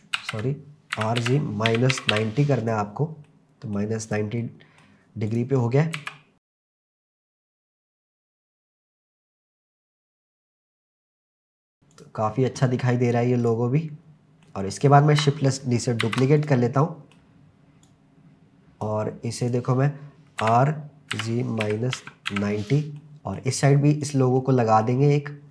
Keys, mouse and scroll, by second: 0.2 ctrl+z, 1.0-2.1 typing, 2.6 click, 3.3-3.8 middle drag, 4.0 click, 4.4-4.8 middle drag, 5.3 click, 6.0 s, 6.3 click, 6.3-6.9 scroll down 4, 6.9 click, 7.0 middle click, 7.2 click, 7.8 click, 8.0 scroll up 2, 8.2 click, 9.3 click, 9.8 click, 10.0 scroll up 1, 10.1 middle click, 10.4 scroll down 1, 10.5 click, 11.2 middle click, 11.5 KP_0, 11.9 click, 13.4 click, 14.0-14.4 scroll down 1, 14.4-15.2 middle drag, 16.0 shift+d, 16.4 click, 16.8-17.5 middle drag, 17.9 click, 19.4 click, 20.4-22.3 typing, 22.6 click, 23.0 middle click, 24.0 click, 24.4-24.9 middle drag.